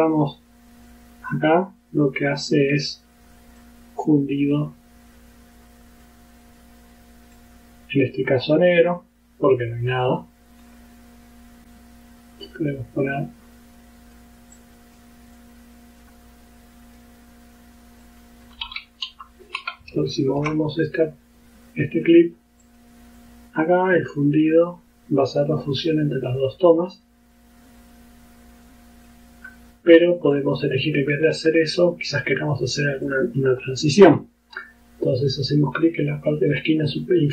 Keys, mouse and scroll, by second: 0.9-3.8 drag, 4.6-6.3 drag, 7.4-8.8 drag, 9.0-10.9 drag, 11.6-12.5 scroll down 1, 12.5-14.4 drag, 14.6 click, 15.4-17.2 drag, 18.1 click, 19.1 Left, 20.0-20.6 ctrl+scroll up 4, 20.9-22.3 ctrl+drag, 22.7 click, 23.2-29.3 drag, 30.4 click, 32.1 click, 33.1 click.